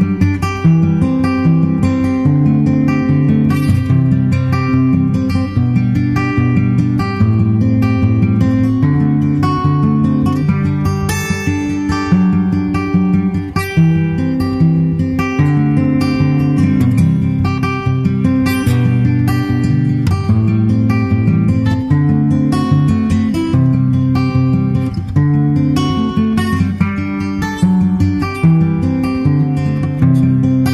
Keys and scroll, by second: 0.5 super+Tab, 0.7 super+Tab, 4.6 super+Tab, 5.2 super+s, 5.2 super+Tab, 10.4 super+Tab, 11.4 super+Tab, 30.5 super+Right.